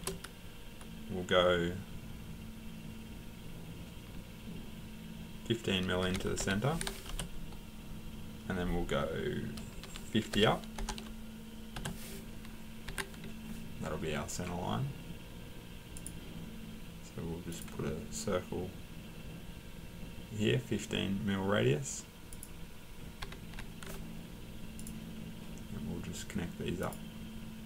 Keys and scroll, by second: 6.0-6.4 typing, 10.1-10.8 typing, 12.9 Escape, 23.2 Escape, 23.5 Escape.